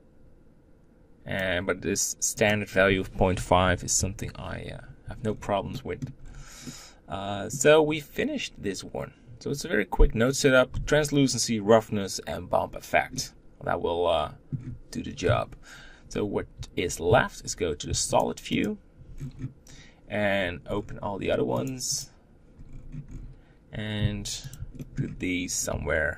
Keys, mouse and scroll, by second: 3.7-4.8 drag, 4.8-5.5 scroll down 3, 5.5 middle click, 6.0-6.4 scroll down 1, 6.4-15.0 middle drag, 15.0 KP_7, 18.4 shift+click, 18.9 scroll down 2, 19.4-20.8 scroll down 8, 21.3-22.4 drag, 22.4-23.0 scroll up 10, 23.8 s, 24.5 shift+middle click, 25.2 scroll up 2, 25.5 g.